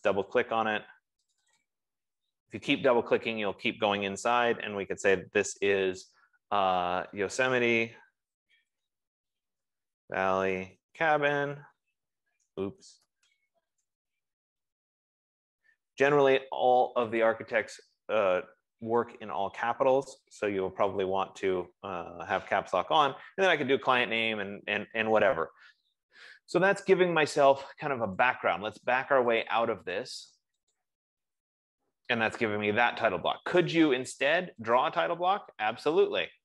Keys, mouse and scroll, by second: 0.5 click, 0.7 click, 1.6 click, 2.1 click, 4.5 ctrl+a, 7.1-13.6 typing, 8.6 Caps_Lock, 14.7-16.0 typing, 17.6 click, 21.1 click, 27.9 click, 28.7 click, 29.9 click, 30.5 click, 35.2 click.